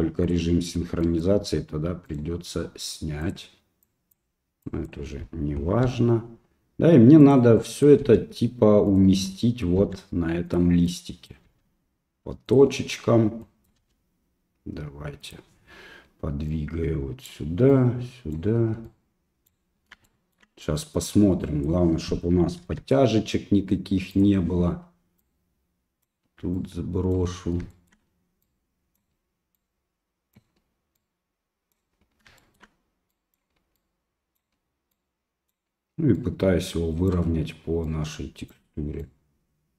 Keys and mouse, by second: 0.2 click, 1.0 click, 2.1 right click, 3.3 click, 4.8 click, 5.9 g, 7.8 click, 8.0 g, 9.4 click, 9.8 g, 11.0 click, 11.5 g, 13.6 click, 13.8 g, 16.5 right click, 17.7 right click, 18.8 right click, 20.1 shift+middle click, 21.4 click, 22.6 g, 25.2 right click, 26.6 right click, 27.7 shift+middle click, 28.4 right click, 29.6 right click, 31.0 right click, 32.4 shift+middle click, 33.1 right click, 33.8 right click, 34.9 right click, 36.1 right click, 37.9 right click, 39.0 right click.